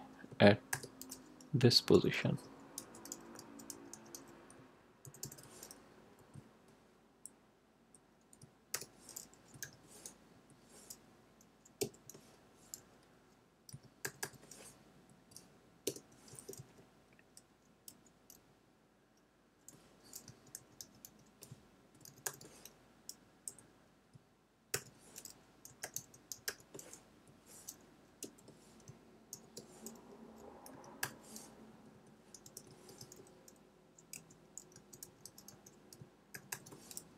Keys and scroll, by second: 0.7 shift+0, 1.5 Return, 1.9 Tab, 2.7-5.7 typing, 7.7 Left, 8.7 shift+", 9.6 y, 10.3 Right, 11.7 ,, 13.6 2, 14.0 0, 14.9 Right, 15.8 Return, 16.2 Tab, 17.8 ., 19.9-22.7 typing, 23.4 Left, 24.7-26.9 typing, 27.1 Right, 28.1 ,, 29.3 shift+", 30.6 5, 31.0 0, 31.6 Right, 32.4 Return, 32.6 Tab, 34.1-36.9 typing.